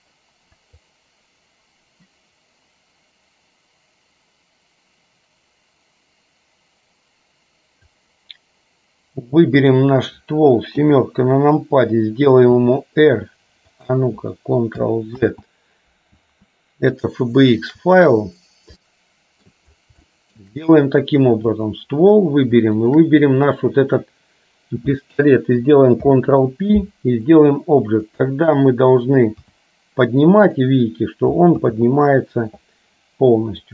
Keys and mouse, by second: 0.9-8.2 drag, 9.7 click, 10.8 KP_7, 12.6 r, 15.4 ctrl+z, 17.2 shift+click, 18.9 middle click, 20.3 shift+middle click, 21.7 click, 22.9 shift+click, 26.2 ctrl+p, 29.4 g, 31.8 ctrl+z.